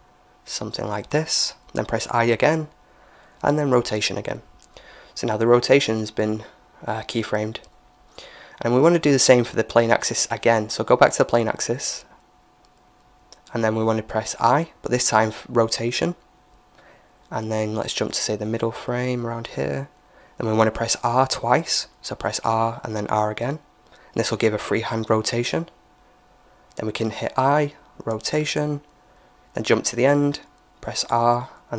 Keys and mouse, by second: 1.8 i, 5.3-7.1 drag, 9.7-11.6 right drag, 11.1-14.4 drag, 18.0-19.8 drag, 21.2 r, 26.2 i, 28.8-30.4 drag, 30.7 r.